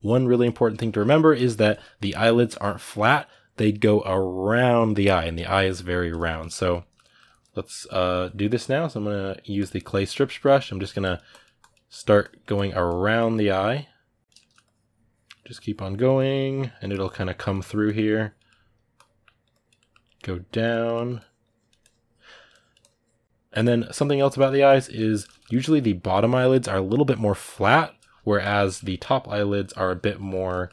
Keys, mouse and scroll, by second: 9.4 click, 9.7 ctrl+middle click, 10.6-14.2 drag, 14.2 shift+middle click, 14.4-18.2 drag, 18.2 middle click, 18.7 click, 19.5 middle click, 19.8 click, 20.5 ctrl+middle click, 20.9-23.2 drag, 23.2 ctrl+middle click, 23.7 click, 24.1 ctrl+middle click, 24.4 click, 24.9-29.4 ctrl+middle drag, 29.4 click, 30.1 ctrl+middle click, 30.6-30.7 drag.